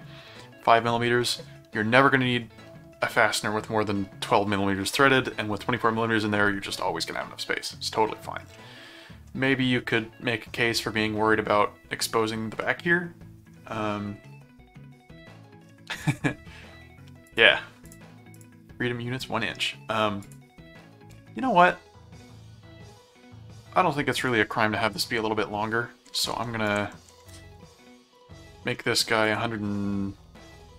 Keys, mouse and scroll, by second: 8.5 middle click, 9.9 middle click, 12.6 middle click, 14.2 middle click, 16.0 click, 17.3 click, 17.9 click, 19.2 middle click, 20.2 click, 21.6-24.0 middle drag, 24.2 click, 25.0 ctrl+Tab, 26.0 ctrl+Tab, 26.7 ctrl+shift+Tab, 28.1 click, 29.2 click.